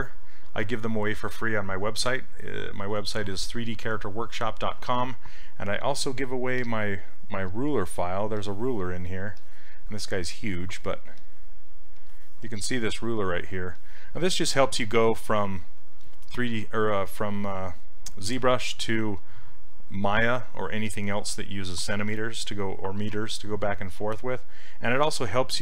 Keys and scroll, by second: 14.9 s.